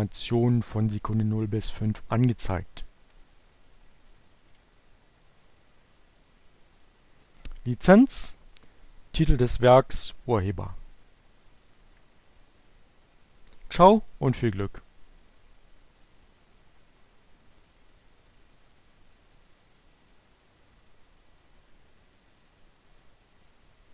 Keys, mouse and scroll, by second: 3.9 click.